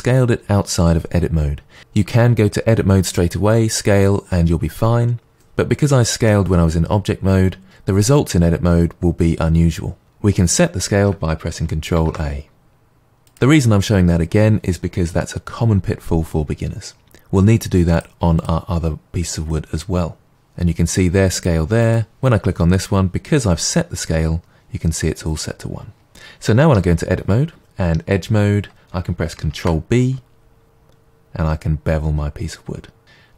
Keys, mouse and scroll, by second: 11.9 ctrl+a, 17.9 click, 18.4-19.0 drag, 21.3 drag, 21.8 click, 26.6 Tab, 29.5 ctrl+b, 33.0 click.